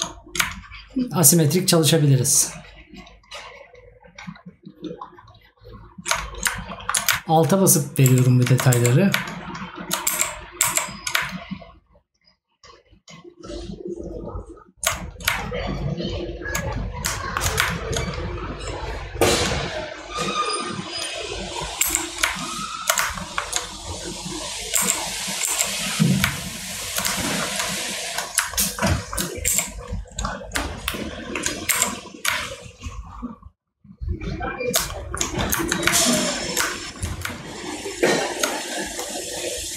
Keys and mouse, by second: 6.8 right click, 17.2 right click, 23.2 right click, 27.3 right click, 29.0 right click, 31.1 right click, 34.9 right click, 36.8 right click.